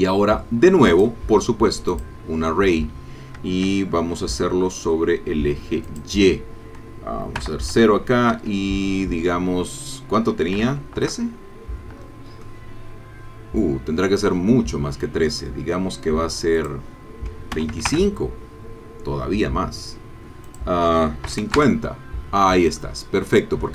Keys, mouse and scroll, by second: 0.9 click, 1.9 click, 3.0-3.3 scroll down 1, 3.9-5.1 shift+scroll down 4, 5.8 click, 7.4 KP_0, 8.3 Tab, 10.5 KP_1, 10.6 KP_3, 11.0 KP_Enter, 12.4-14.4 drag, 16.6 click, 17.5 KP_2, 17.7 KP_5, 17.9 KP_Enter, 20.5 click, 21.3 KP_5, 21.4 KP_0, 21.6 KP_Enter, 22.8-23.7 drag.